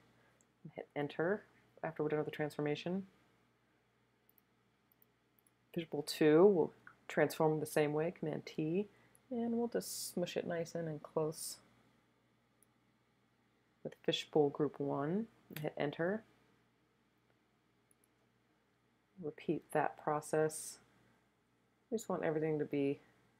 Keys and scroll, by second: 0.9 Return, 8.4 super+t, 15.6 Return, 19.6 super+t.